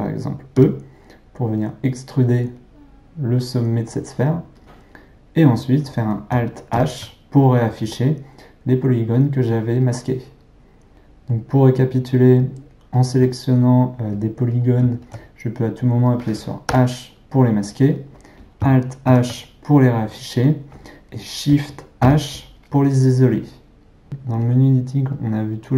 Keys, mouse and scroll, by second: 0.6 e, 6.7 alt+h, 10.9-13.0 middle drag, 13.0 alt+click, 14.6 click, 15.1 alt+click, 16.7 h, 19.1 alt+h, 22.0 shift+h.